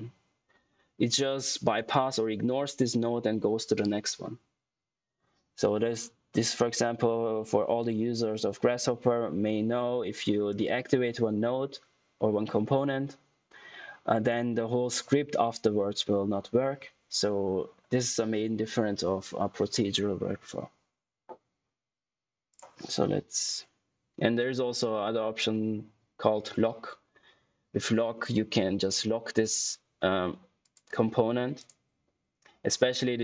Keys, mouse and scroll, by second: 22.6 click, 30.5 click.